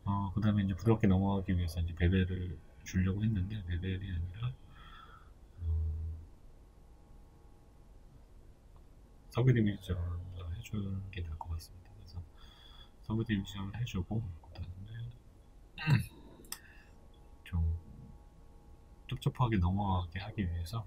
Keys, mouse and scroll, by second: 0.1 ctrl+z, 0.7 middle click, 1.6 right click, 2.3 2, 2.5 right click, 3.6 alt+shift+right click, 3.9 alt+shift+right click, 4.5 alt+shift+right click, 5.6 alt+shift+right click, 6.3 alt+shift+right click, 7.0 alt+shift+right click, 7.5 alt+shift+right click, 7.9-9.3 middle drag, 9.3 alt+shift+right click, 9.8 alt+shift+right click, 11.0 alt+shift+right click, 11.9 alt+shift+right click, 12.5-13.7 middle drag, 13.7 alt+shift+right click, 14.0-15.0 middle drag, 15.0 alt+shift+right click, 15.4 scroll down 1, 15.8-17.6 middle drag, 17.6 alt+shift+right click, 18.1-19.8 middle drag, 19.0-19.8 scroll up 2, 19.8 right click, 20.3 shift+right click.